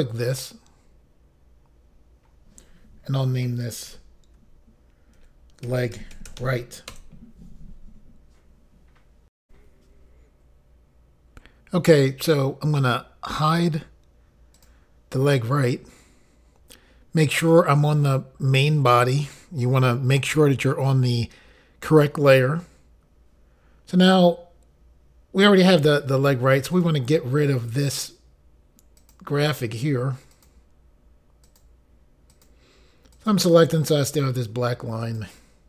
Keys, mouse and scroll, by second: 5.2-6.9 typing, 6.9 Return, 9.4 Insert, 9.7 Pause, 14.5 click, 17.4 click, 26.7 click, 27.9 click, 29.0 click, 30.3 click, 31.4 click, 32.3 click, 33.1 click, 35.0 click.